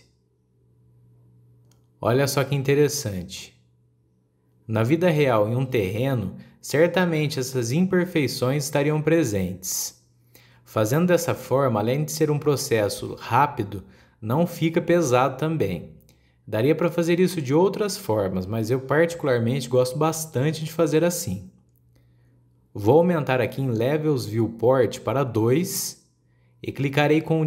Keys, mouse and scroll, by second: 0.9-1.3 scroll up 3, 1.3-3.9 middle drag, 3.9 scroll down 1, 4.0-7.0 middle drag, 7.4 scroll down 1, 7.6-10.4 middle drag, 10.4 KP_1, 11.1-12.5 middle drag, 12.5 scroll down 1, 12.7-13.6 middle drag, 13.6 scroll up 1, 13.8-14.5 middle drag, 14.5 scroll up 1, 14.7-19.2 middle drag, 20.5-20.8 scroll down 2, 21.1-23.5 scroll up 1, 26.5 click, 27.3-27.4 scroll up 2.